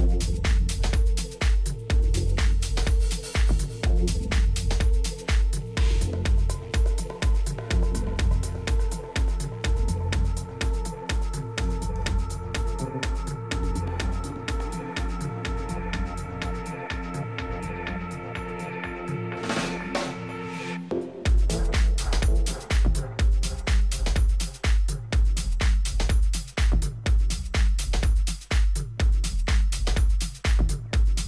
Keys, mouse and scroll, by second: 6.3-8.2 middle drag, 7.7 Tab, 8.2 Tab, 8.7 click, 8.9-10.7 middle drag, 11.2 middle click, 12.1 middle click, 13.9-15.6 drag, 16.8-18.7 drag, 23.3-25.1 middle drag, 28.5-30.5 drag.